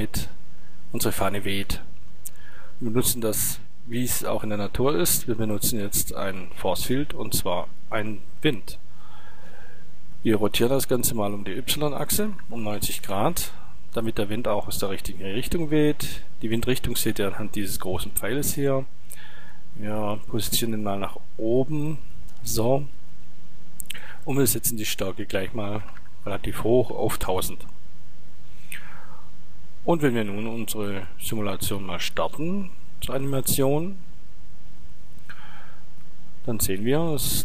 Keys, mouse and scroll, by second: 0.8 middle click, 5.4 shift+a, 10.8 r, 13.1 click, 13.3-13.9 drag, 14.2 click, 14.5-17.1 drag, 20.4-22.2 drag, 22.2 middle click, 24.4-27.8 drag, 30.8-33.1 drag, 33.2-35.2 drag.